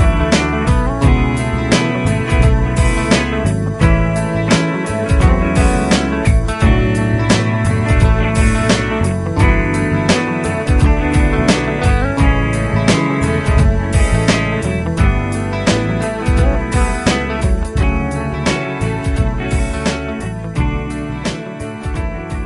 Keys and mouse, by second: 7.2 F12.